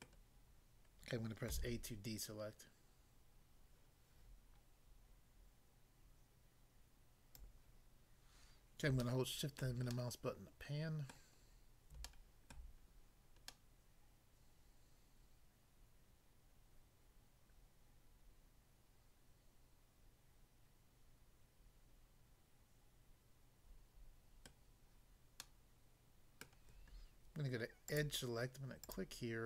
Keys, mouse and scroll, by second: 0.1 middle click, 1.5 a, 7.3 click, 7.5 click, 9.0 shift+middle click, 9.6 shift+middle click, 9.9 shift+middle click, 11.4 scroll up 1, 12.1 shift+middle click, 12.5 shift+middle click, 12.9-13.3 scroll up 1, 24.5 middle click, 25.4 middle click, 26.4 middle click, 27.9 click, 28.8 click.